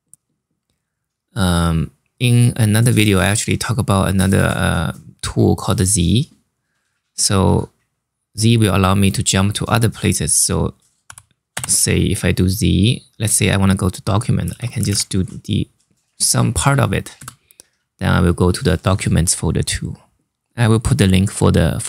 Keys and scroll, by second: 10.8 z, 11.2 space, 13.2-15.1 typing, 16.9 Return.